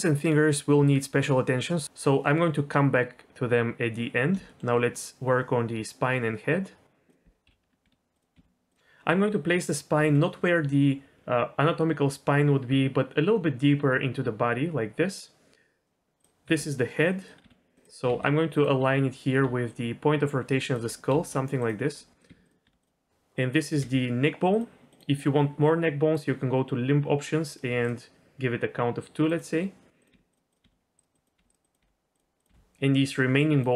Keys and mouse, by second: 4.4 shift+click, 7.5 l, 7.8 r, 8.3 g, 9.9 g, 16.2 click, 16.5 g, 17.4 r, 18.0 g, 19.4-22.6 typing, 23.4 click, 23.8 g, 26.1-29.4 drag, 30.0 click, 30.1-32.5 typing, 30.5 click, 31.1 click, 31.6 click, 32.4 click, 33.4 click.